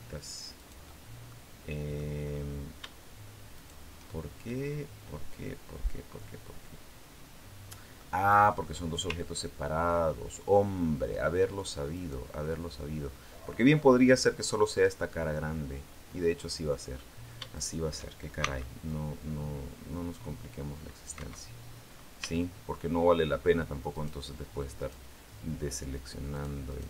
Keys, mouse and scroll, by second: 0.3 shift+right click, 1.1 shift+middle click, 2.0-2.4 scroll up 2, 3.3 shift+right click, 4.3-7.9 middle drag, 11.7 right click, 15.1-16.9 middle drag, 17.3 shift+right click, 18.2 shift+c, 18.7-21.1 drag, 20.9 Escape, 21.7-22.1 scroll up 2, 22.1 shift+middle click, 23.7 shift+right click, 24.6 shift+right click, 26.1 shift+right click, 26.6 shift+right click.